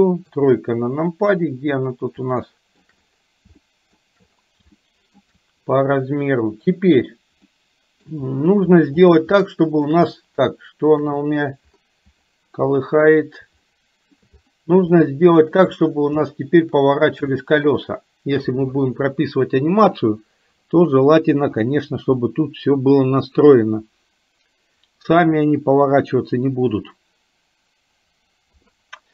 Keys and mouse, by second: 0.3 KP_3, 2.4 middle click, 3.7 shift+middle click, 4.7 shift+middle click, 7.6 middle click, 9.4 shift+middle click, 11.1 KP_7, 13.7 shift+middle click, 14.9 shift+middle click, 16.2 shift+middle click, 17.3 shift+middle click.